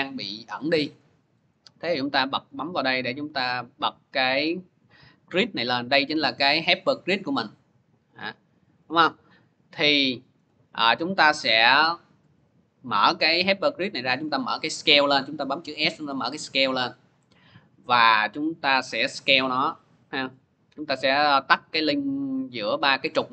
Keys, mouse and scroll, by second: 2.2-4.2 drag, 7.3 click, 7.6 click, 8.1 click, 8.6 click, 9.5 scroll, 9.8 middle click, 10.2 middle click, 12.0 click, 14.5 scroll, 14.5 s, 19.3 click, 21.0 click, 21.5 click, 22.1 middle click.